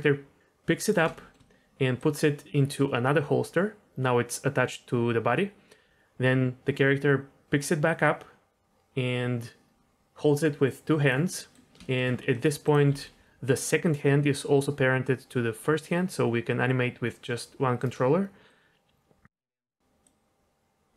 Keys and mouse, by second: 1.1 shift+middle drag, 1.9-11.1 drag, 11.3 middle click, 11.8 shift+middle click, 12.3 click, 12.9 g, 18.5-19.2 drag, 19.3 shift+middle drag, 19.6 middle click, 20.0-20.9 drag.